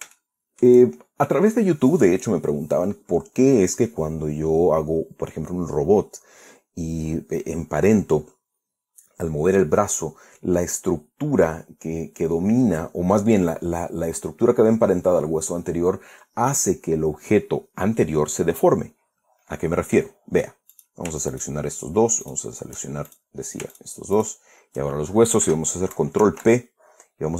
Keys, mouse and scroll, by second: 0.4 shift+scroll up 2, 0.7-1.4 shift+middle drag, 21.4 middle click, 22.0 shift+right click, 22.9 shift+middle click, 23.7 shift+drag, 24.4 shift+drag, 24.8 shift+right click, 26.8 ctrl+p.